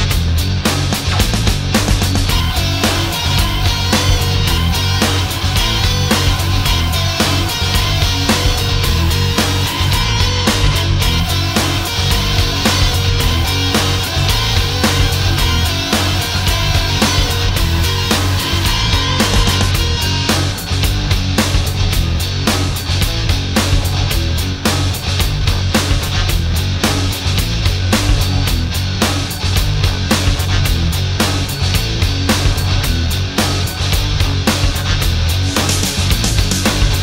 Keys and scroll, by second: 4.9 ctrl+d, 5.8 ctrl+d, 6.7 ctrl+d, 7.4 ctrl+d, 8.1 ctrl+d, 8.6 ctrl+d, 9.2 ctrl+d, 11.8 ctrl+d, 15.4 space, 27.8 space.